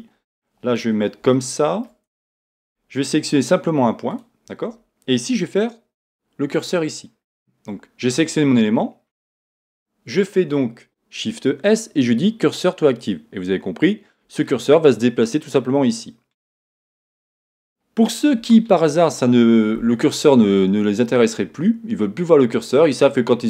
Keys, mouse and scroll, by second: 0.0 scroll up 1, 1.0-1.3 scroll down 1, 1.3 shift+middle click, 2.1 Tab, 3.2 middle click, 4.1 click, 9.6 shift+s, 14.5-23.4 middle drag, 17.5-18.5 scroll down 2.